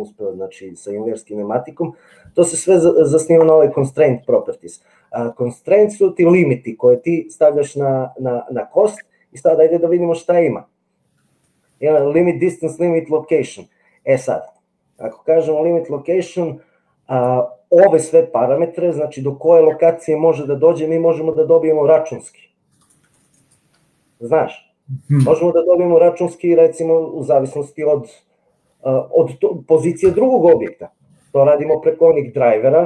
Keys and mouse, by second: 9.6-14.7 drag.